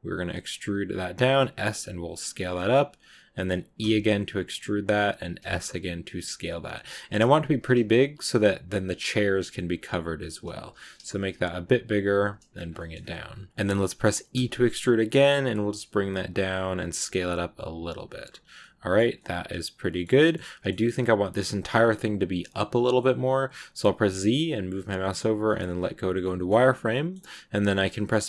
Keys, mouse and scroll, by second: 12.4-12.7 scroll up 3, 12.7 shift+middle click, 13.5-14.2 scroll up 1, 14.2 e, 18.3 scroll down 2, 18.5 middle click, 19.0 scroll down 1, 19.3 middle click, 20.2 scroll up 1, 20.4-23.9 middle drag, 23.9 z, 26.1-27.4 middle drag, 27.4 b.